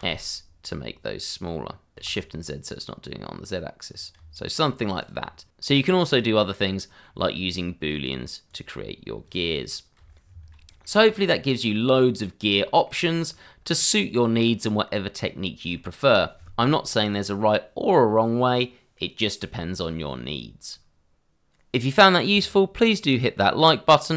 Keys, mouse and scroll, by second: 0.0 s, 2.5 shift+z, 4.0 click, 4.1 Tab, 5.0 click, 5.1 scroll down 1, 7.0 middle click, 8.4 click, 9.9 h, 10.2 scroll down 1, 10.7 shift+middle click, 11.0-11.6 scroll up 1, 11.6 middle click, 12.7 shift+middle click, 13.3-15.2 scroll down 1, 15.7 middle click, 15.9 shift+middle click.